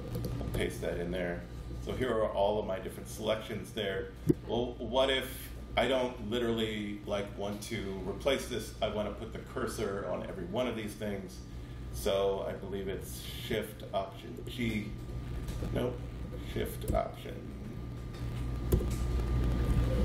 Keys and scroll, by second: 0.5 super+v, 14.4 alt+shift+g, 16.9 BackSpace, 18.7 shift+super+g.